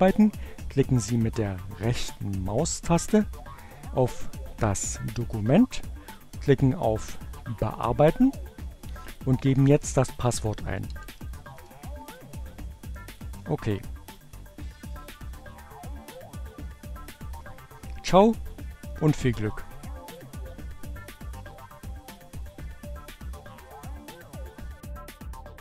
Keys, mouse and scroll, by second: 1.8 right click, 4.7 click, 9.2-10.3 typing, 12.2 click.